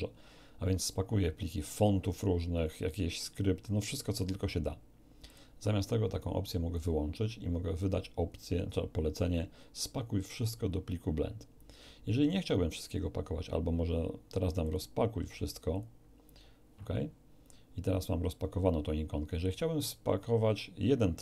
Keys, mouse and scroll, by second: 5.2 click, 6.7 click, 14.6 click, 15.7 click.